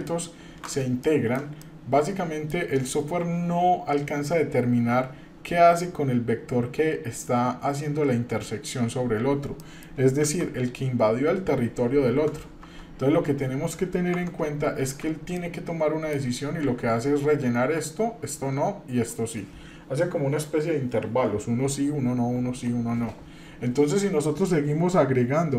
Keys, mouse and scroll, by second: 0.2 scroll up 2, 1.0-1.4 shift+middle drag, 1.6-2.5 middle drag, 4.3 scroll up 1, 9.6 middle click, 10.2 shift+z, 12.6 Tab, 14.2 Tab, 14.8 shift+z, 15.4-16.1 middle drag, 24.2 middle click.